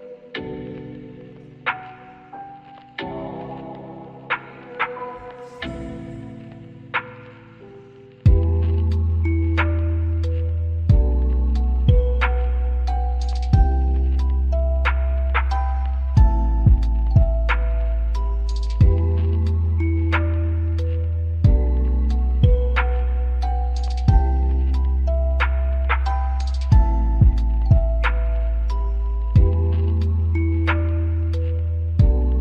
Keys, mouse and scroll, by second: 1.0 alt+middle click, 1.3 alt+click, 6.4 alt+click, 10.3 right click, 18.8 alt+click, 22.0 scroll down 1, 22.3 alt+click, 24.3 alt+middle click, 25.4 alt+click, 26.3 alt+middle click, 27.7 double click, 28.1 alt+click, 30.7 double click.